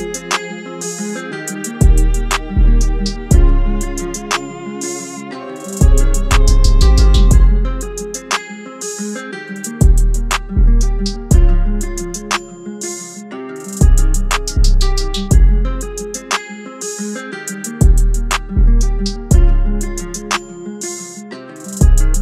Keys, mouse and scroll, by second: 8.6 ctrl+z, 9.0 ctrl+z, 10.7 typing, 12.8 double click, 13.9 typing, 15.3-16.7 typing, 19.2 typing.